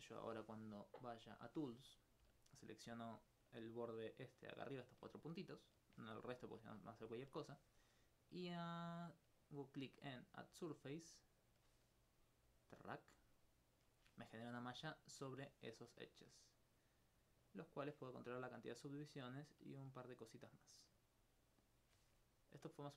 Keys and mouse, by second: 1.3 click, 2.5 alt+right click, 3.0 right click, 4.5 shift+right click, 4.8 shift+right click, 5.3 alt+click, 6.5 alt+click, 7.1 alt+click, 12.2 alt+click, 15.1 alt+click, 17.0-18.3 drag, 22.6 right click.